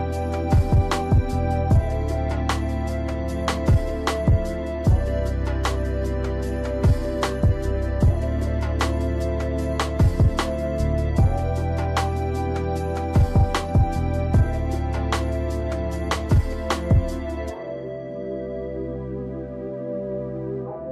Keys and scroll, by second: 5.7 Delete, 6.3 ctrl+z, 9.3 Delete, 17.5 ctrl+z, 19.3 ctrl+z.